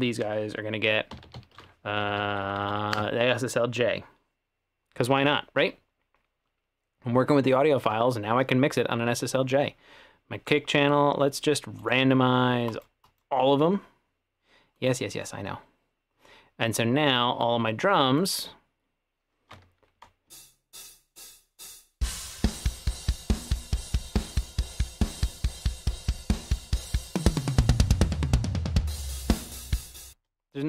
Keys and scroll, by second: 1.1-1.9 typing, 2.0 Down, 2.2 Down, 2.3 Down, 2.5 Down, 2.6 Down, 20.3 space, 30.2 space.